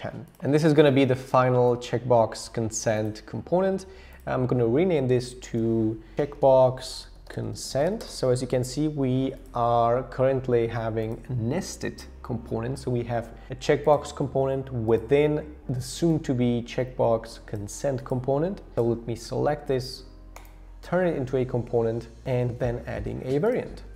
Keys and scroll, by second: 5.4 super+r, 5.9-9.8 typing.